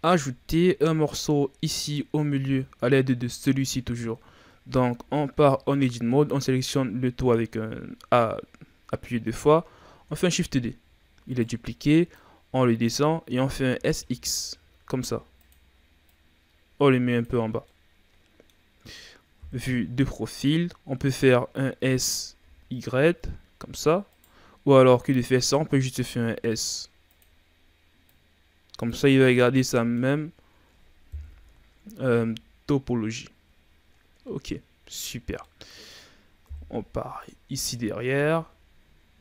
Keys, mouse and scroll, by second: 0.2-0.7 shift+scroll down 4, 2.4 Tab, 4.8 a, 5.2 a, 9.9 shift+d, 12.0-13.6 drag, 13.6 s, 16.0-17.4 drag, 17.4 scroll down 4, 17.6-19.3 middle drag, 19.3 KP_3, 20.2-20.6 shift+scroll down 1, 20.6-21.7 scroll up 2, 21.7 s, 25.6 s, 28.1 click, 29.0 Tab, 29.2-29.5 scroll down 4, 29.5-31.1 middle drag, 31.1 KP_1, 31.9 a, 32.2-32.7 scroll down 1, 33.6-34.6 ctrl+scroll down 1, 34.6-35.4 scroll up 5, 35.4-36.4 middle drag, 36.4 KP_3, 37.8 scroll up 1, 38.0 Tab, 39.1 r.